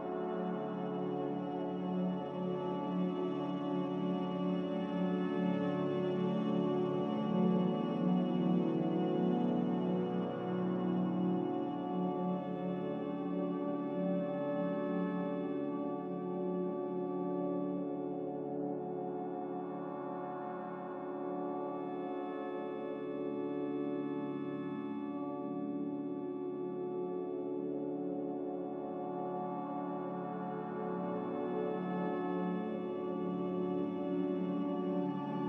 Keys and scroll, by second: 6.3-8.5 typing, 17.6-18.7 typing, 17.9 Return, 22.7 Return, 29.2 a, 30.8-31.2 typing, 31.5 Return, 35.2-35.4 typing.